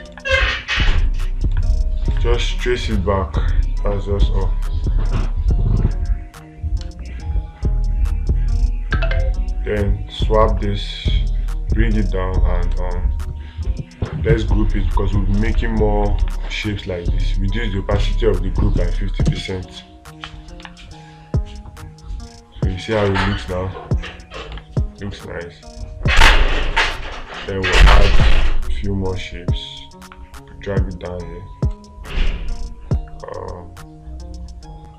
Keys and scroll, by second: 0.6 space, 1.9 space, 15.9 space, 21.1 space, 23.5 space, 25.0 space.